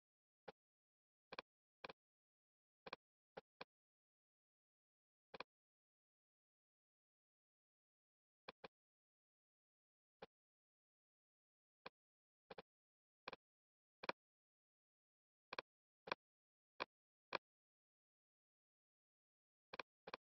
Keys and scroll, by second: 14.7 super+z, 18.5 ↺.